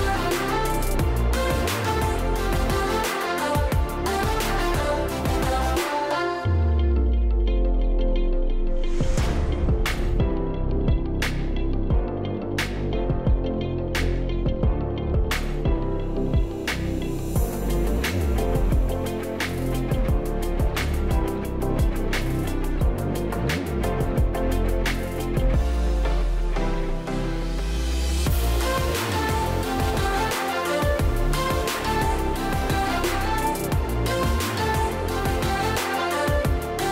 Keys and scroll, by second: 6.3-7.0 space, 10.8 Escape, 15.0 Escape, 23.5 Escape, 24.4-25.3 space, 29.2 Escape, 32.9 Escape, 33.9 space, 34.4 space, 34.4 space, 34.5-35.1 space.